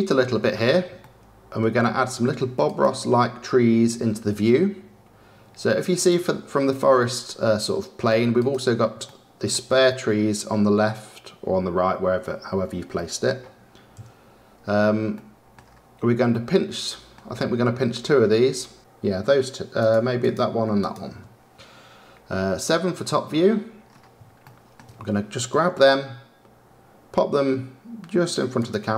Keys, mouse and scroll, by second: 1.0-2.6 shift+middle drag, 2.6 click, 5.8 click, 8.3 click, 9.0-12.8 shift+middle drag, 12.9 middle click, 13.9 KP_Decimal, 14.5-15.1 scroll down 3, 15.1-15.5 middle drag, 15.5-16.2 scroll down 3, 16.2-18.8 middle drag, 18.8 scroll up 2, 19.8 click, 20.2 click, 20.7 shift+click, 22.5 KP_7, 23.3-24.2 scroll down 10, 24.3 shift+scroll up 1, 24.4-26.0 shift+middle drag, 26.0 g.